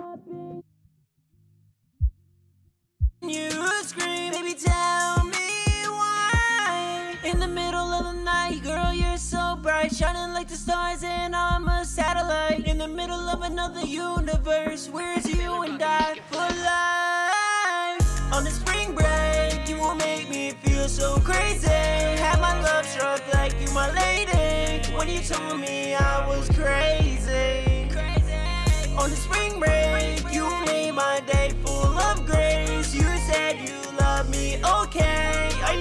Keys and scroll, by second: 6.2 ctrl+super+w, 6.5 super+s, 7.7 ctrl+super+w, 8.6 ctrl+super+w, 9.4 super+s, 10.2 super+Tab, 13.9 super+Tab, 16.5-17.5 typing, 18.9 Down, 19.0 Down, 19.2 Return, 19.8 typing.